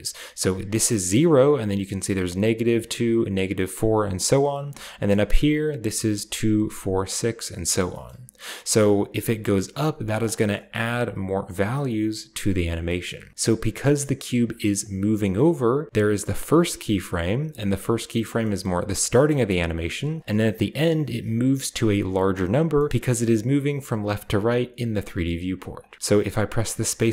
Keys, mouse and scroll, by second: 0.4-0.8 drag, 2.1-4.5 drag, 5.2-7.3 drag, 7.8 middle click, 8.3-10.1 drag, 10.6-11.9 drag, 12.9 middle drag, 13.1 scroll down 1, 14.6-15.5 drag, 17.9 click, 18.6-19.9 scroll up 1, 20.0 click, 22.6 middle drag, 22.9 g, 23.0 middle click, 25.5-26.9 drag, 25.9 space, 26.9 space, 27.0 click.